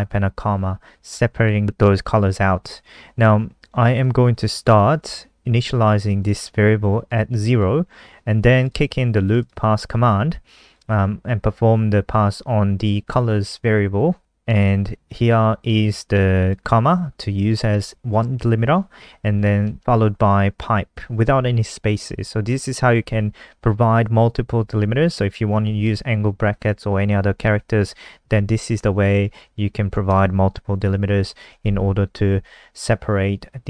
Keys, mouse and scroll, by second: 6.2 click, 6.3 click, 7.1 click, 8.7 click, 9.2 click, 9.4 click, 10.6 click, 10.8 click, 15.3 click, 19.2 Right, 24.7 Right, 25.4 typing, 27.4 typing, 28.9 shift+Left, 29.1 shift+Left, 29.4 shift+Left, 29.7 shift+Left, 30.1 BackSpace.